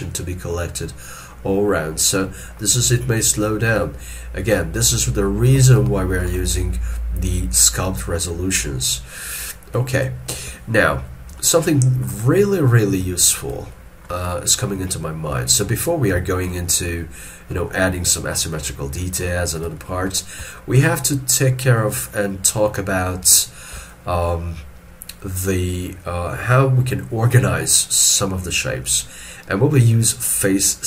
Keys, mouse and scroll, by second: 4.8 scroll down 1, 4.9 shift+middle click, 5.6 ctrl+middle click, 11.4 ctrl+middle click, 12.3 middle click, 13.6 middle click, 14.4 middle click, 18.8 shift+scroll down 1, 19.8 shift+middle click, 20.5 shift+middle click.